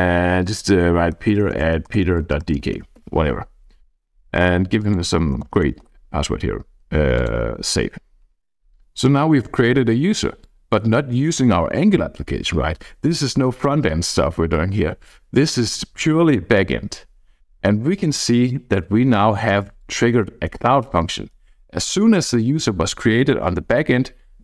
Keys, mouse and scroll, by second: 0.8-2.9 typing, 3.0 Tab, 3.2 Tab, 4.1-4.8 scroll down 2, 4.9-6.3 typing, 6.0-6.9 scroll down 1, 7.1 click, 10.4-16.6 drag, 17.1-18.6 drag, 19.8-21.5 drag.